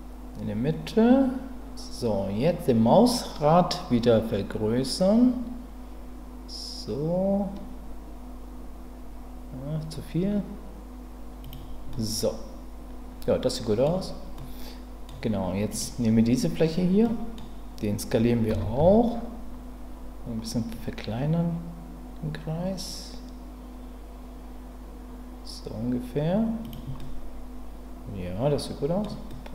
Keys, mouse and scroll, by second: 11.4 click, 11.9-13.8 middle drag, 14.3 middle click, 15.7 click, 17.0 middle click, 18.5 s, 18.8 x, 26.6 click, 27.0-29.0 middle drag, 29.3 middle click.